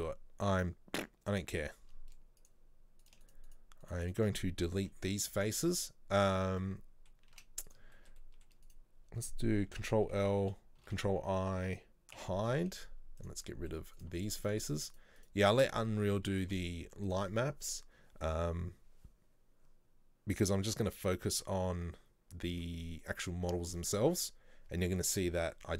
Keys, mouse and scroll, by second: 2.5 click, 3.1 right click, 3.3 shift+right click, 3.6 shift+right click, 3.9 shift+right click, 4.1 shift+right click, 5.6 Delete, 5.8-7.8 middle drag, 7.8 z, 8.0 shift+middle click, 8.7 right click, 9.9 ctrl+l, 11.0 ctrl+i, 12.3 h, 13.5 middle click, 14.1 right click, 14.3 shift+right click, 14.5 shift+right click, 14.7 shift+right click, 15.0 shift+right click, 15.5 shift+right click, 17.2 Delete, 23.2-25.7 middle drag.